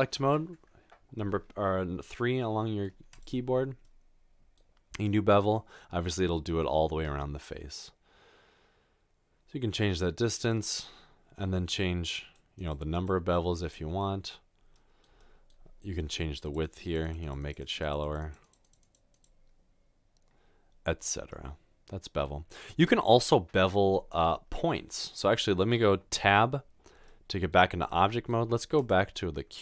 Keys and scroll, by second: 26.2 Tab.